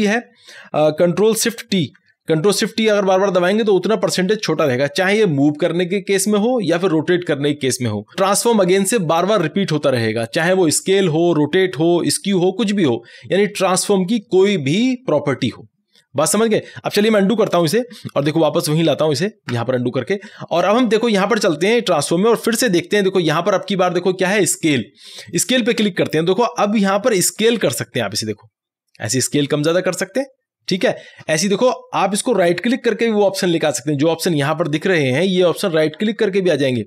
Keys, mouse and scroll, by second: 2.0 ctrl+shift+t, 17.6 ctrl+z, 20.6 click, 25.3-33.4 drag, 33.8 click.